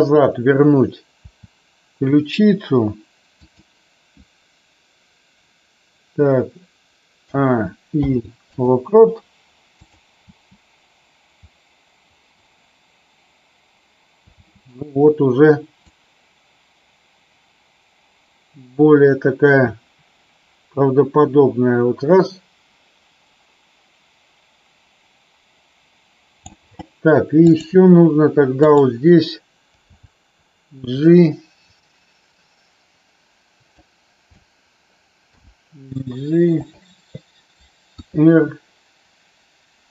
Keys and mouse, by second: 1.2 r, 3.4 click, 7.2 a, 7.9 i, 9.8 click, 10.2 space, 14.4 space, 15.8-26.4 drag, 27.4 click, 28.6-29.2 drag, 29.9 g, 33.8 click, 35.3 g, 36.6 click, 37.9 r.